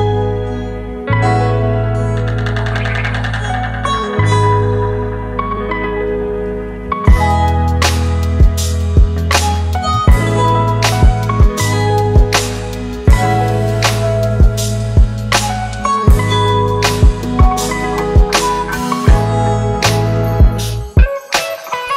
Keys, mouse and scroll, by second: 0.7 ctrl+click, 2.6 ctrl+click, 7.0 ctrl+click, 10.0 ctrl+click, 11.5 double click, 16.6 ctrl+Return, 20.1 alt+BackSpace, 21.7 ctrl+d.